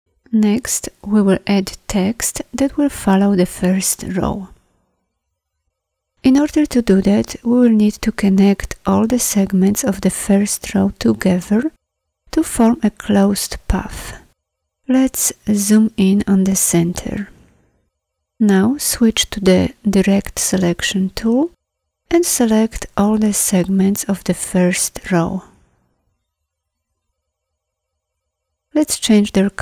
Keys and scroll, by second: 20.1 a.